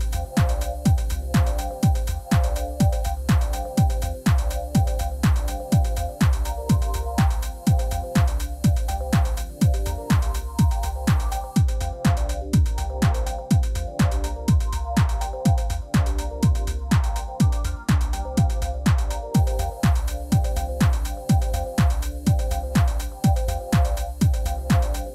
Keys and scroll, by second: 0.6 shift+z, 1.6 z, 3.5 Tab, 4.0 g, 4.1 z, 6.1 g, 6.2 z, 7.0 alt+a, 10.4 Tab, 12.9 3, 14.7 ., 16.0 i, 17.9 i.